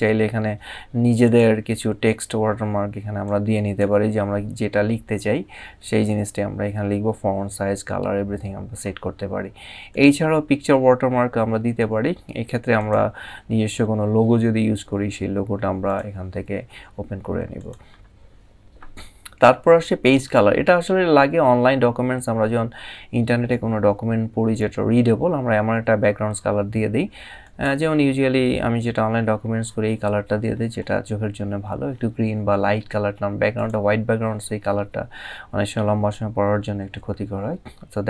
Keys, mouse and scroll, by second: 0.9 click, 2.9 click, 9.6 click, 12.5 click, 15.5 click, 17.3 click, 19.7 click, 27.1 click, 28.5 scroll down 1, 30.2 scroll up 1, 33.2 click.